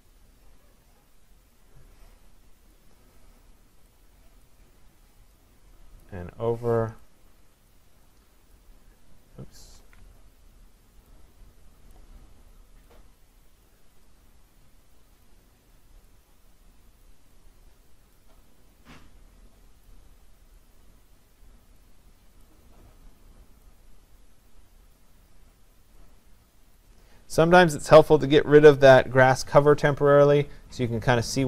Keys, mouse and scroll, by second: 2.7 click, 4.5 click, 6.1 click, 7.7 click, 8.6 click, 9.8 ctrl+z, 12.0 click, 13.7 click, 15.3 click, 20.6 click, 22.5 click, 24.9 click, 26.8 click, 29.6 click.